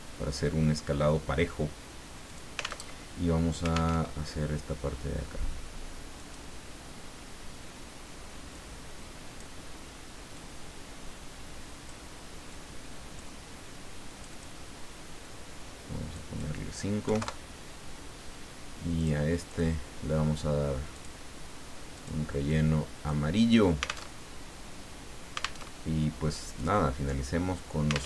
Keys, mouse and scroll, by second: 2.3 click, 2.9 alt+Tab, 3.9 alt+Tab, 6.2 click, 8.5-9.9 drag, 10.3-12.2 drag, 12.5-13.7 drag, 14.1 click, 16.1 click, 17.0 KP_5, 17.2 KP_Enter, 19.0 click, 19.5 click, 20.9 click, 22.0 click, 22.5 click, 24.0 alt+Tab, 25.6 alt+Tab, 26.6 click.